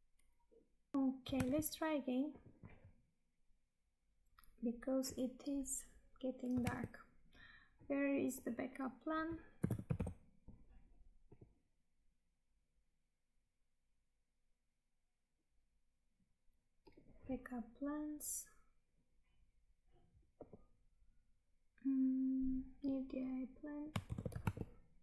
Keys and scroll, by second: 0.9 Tab, 7.7 Tab, 24.0 ctrl+c, 24.5 Tab.